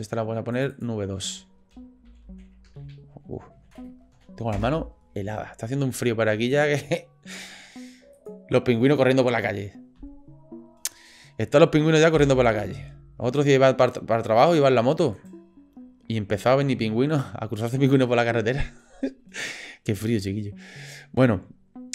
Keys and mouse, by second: 0.5 click, 0.7-4.9 drag, 2.8 BackSpace, 8.1 click, 13.7 drag, 15.1 shift+click.